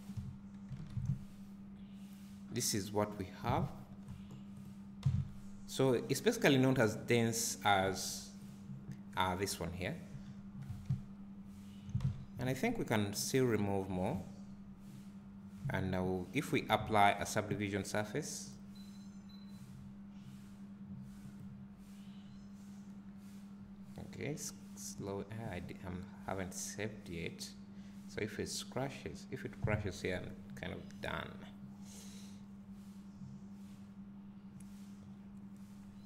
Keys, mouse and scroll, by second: 0.2-0.8 scroll up 1, 0.8 alt+a, 3.8 Tab, 4.0 scroll down 1, 4.6 click, 5.7 Tab, 8.5 click, 10.2 Tab, 10.5 scroll up 1, 10.9 `, 12.0 Tab, 13.1-13.4 scroll down 1, 13.4 `, 14.4 scroll up 1.